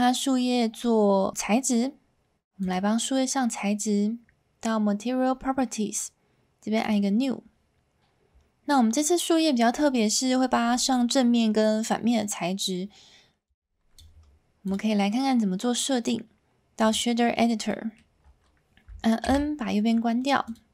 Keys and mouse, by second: 6.8 click, 13.5 click, 14.7-16.9 drag, 17.8 middle click, 19.2 n.